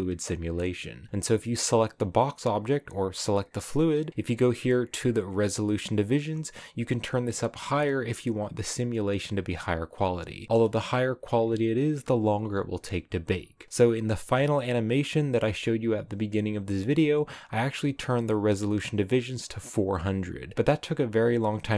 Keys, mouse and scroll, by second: 1.7-21.7 drag.